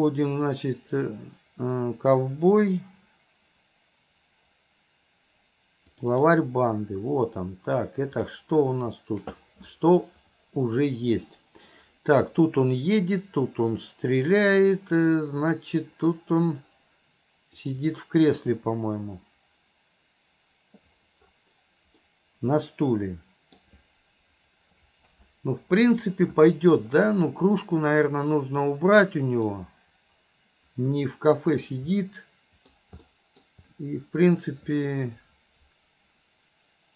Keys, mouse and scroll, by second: 22.1-23.6 middle drag, 27.2-29.5 middle drag, 32.0-32.8 middle drag, 33.1-33.4 middle drag.